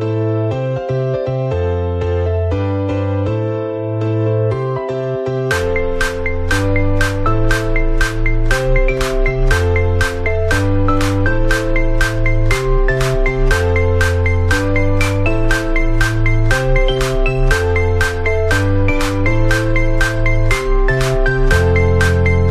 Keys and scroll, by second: 3.7 Delete, 5.6 ctrl+=, 6.6 ctrl+z, 10.8 ctrl+z, 12.6 ctrl+z, 14.7 p.